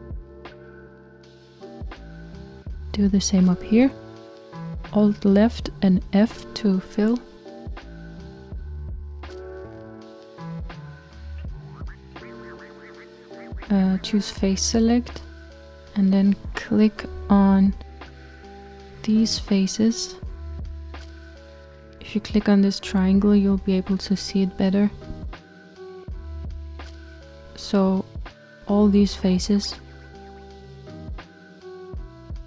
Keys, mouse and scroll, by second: 0.3 f, 5.9 alt+click, 7.2-10.6 middle drag, 10.6 f, 15.3-17.2 drag, 18.8-21.3 middle drag, 21.3 shift+click, 22.5 click, 24.8 click, 26.5 shift+click, 27.5-30.6 middle drag, 30.6 shift+click, 31.3-32.4 middle drag.